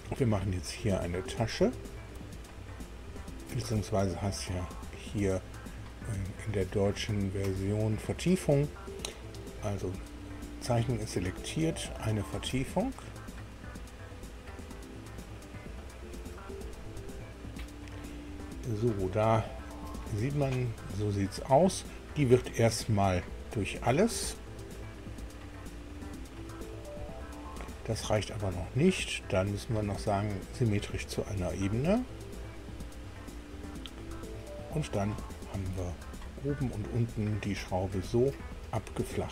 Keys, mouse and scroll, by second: 0.0 middle click, 1.1 middle click, 1.6 shift+middle click, 2.8-3.2 scroll up 2, 3.5-4.8 middle drag, 12.4 click, 19.2 scroll up 2, 19.8 scroll up 2, 19.9 middle click, 22.5 click, 23.5 click, 30.7 click, 35.4-35.8 scroll down 1, 36.0-38.2 middle drag, 38.5 middle click.